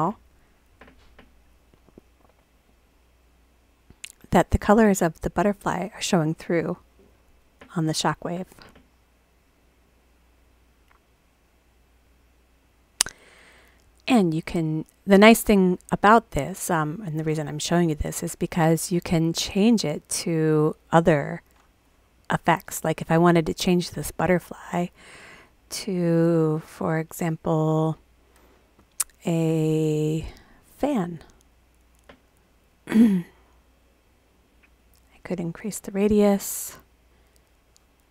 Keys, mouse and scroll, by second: 19.8 click, 25.0 click, 30.8 click, 34.5 click, 34.6 click, 34.8 click, 35.4 click.